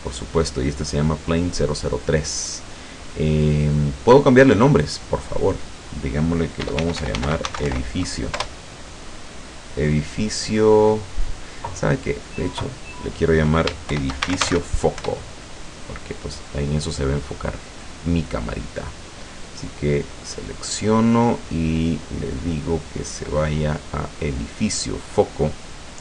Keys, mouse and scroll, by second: 3.5-4.2 scroll up 2, 4.7 click, 5.5 click, 6.6-7.8 typing, 8.4 Return, 9.9 click, 10.4 click, 10.8 click, 12.1 click, 12.5 click, 13.9 shift+-, 14.3 f, 14.5 c, 14.6 shift+o, 15.0 shift+Return, 17.8 right click, 20.1 click, 20.5-21.1 scroll down 4, 22.0 click, 22.9 click, 24.3 click.